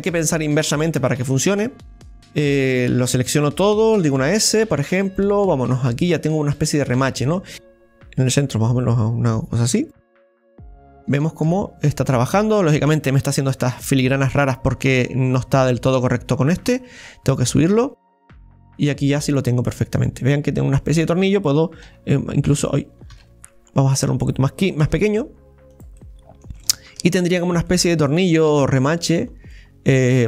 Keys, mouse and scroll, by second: 6.1 click, 6.9 middle click, 7.5 Tab, 7.5-10.3 drag, 10.7-11.7 middle drag, 11.7 scroll up 1, 12.0-15.0 middle drag, 15.9 right click, 16.7-17.7 scroll down 3, 17.7 scroll down 1, 17.7 click, 18.6 scroll down 2, 18.9-23.1 middle drag, 21.9 s, 23.1 ctrl+z, 24.0 right click, 24.8 s, 26.0-28.6 middle drag, 28.6-29.6 scroll up 7, 29.5-30.2 middle drag.